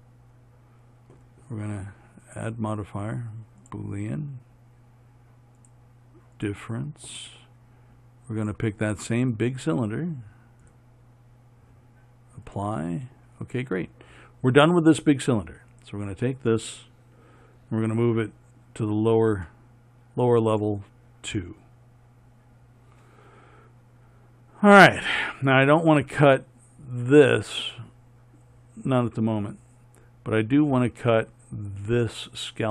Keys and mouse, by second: 0.2-4.0 middle drag, 4.0-18.5 right drag, 18.5 m, 27.2-32.7 right drag.